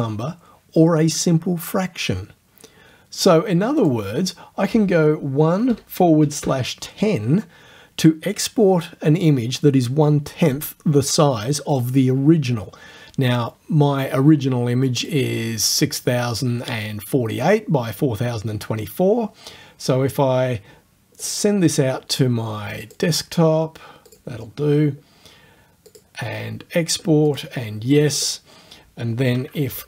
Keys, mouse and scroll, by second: 3.8 click, 6.2 KP_1, 6.4 KP_0, 15.0 click, 21.2 click, 22.9 click, 24.1 click, 25.9 click, 27.3 click.